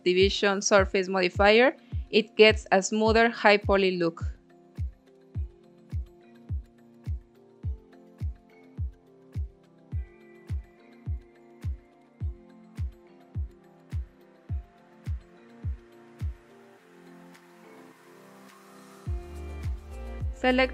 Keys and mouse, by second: 0.5 click, 1.0 middle click, 1.7 ctrl+r, 3.3 click, 4.0 middle click, 4.2 click, 4.9 ctrl+r, 8.1 click, 8.4 click, 9.5 ctrl+r, 10.7 click, 11.1 middle click, 11.8 ctrl+r, 13.7 click, 14.3 middle click, 14.7 click, 15.4 Tab, 16.1-16.6 shift+drag, 17.0-17.6 drag, 17.6-18.3 middle drag, 18.6-19.3 middle drag, 19.6 Tab, 20.0 middle click.